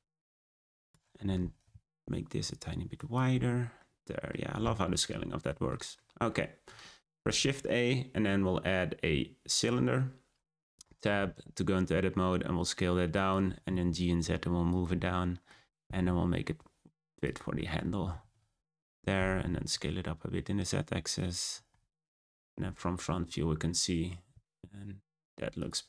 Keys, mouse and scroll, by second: 0.8 click, 1.0 Tab, 1.2 a, 1.3 s, 3.3 Tab, 3.4-3.7 scroll down 3, 3.7-4.6 middle drag, 4.6-5.4 scroll up 3, 5.4-7.1 shift+middle drag, 7.1 shift+a, 10.8 Tab, 11.0 a, 11.2 s, 13.2 Tab, 13.5 g, 15.0-15.5 middle drag, 15.5 Tab, 15.7 a, 15.8 s, 17.5 middle click, 17.8 Tab, 18.0 g, 18.9 Tab, 19.1 a, 19.2 s, 21.5 Tab, 22.9 scroll down 2, 23.1 scroll up 1, 24.3 g, 25.5 click.